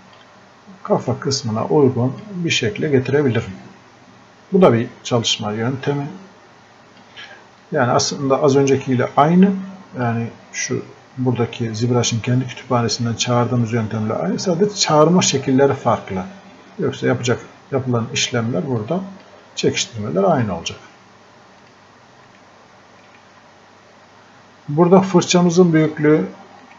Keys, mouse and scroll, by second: 22.3 right click, 25.4 right click.